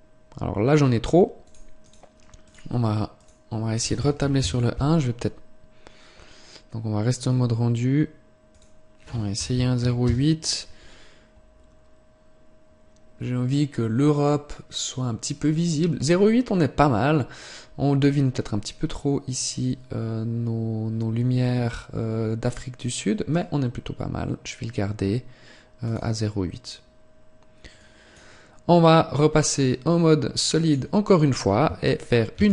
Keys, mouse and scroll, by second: 29.4 click.